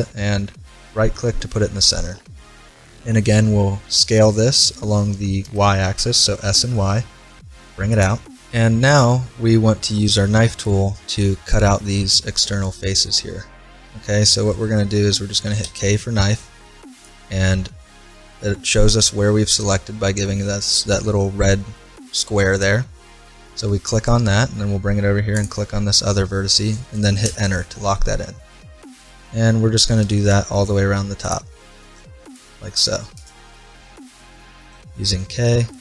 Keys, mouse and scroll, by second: 1.2-3.1 middle drag, 4.0 s, 8.6-10.6 middle drag, 15.6 k, 28.0-29.9 middle drag, 30.0 k, 33.6-35.3 middle drag, 34.7 k.